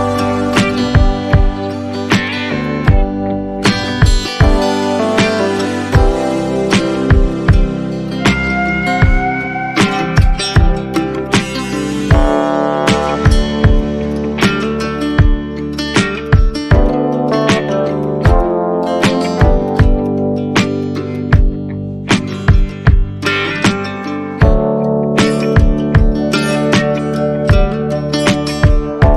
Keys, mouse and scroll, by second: 7.8 alt+middle click, 8.3 shift+click.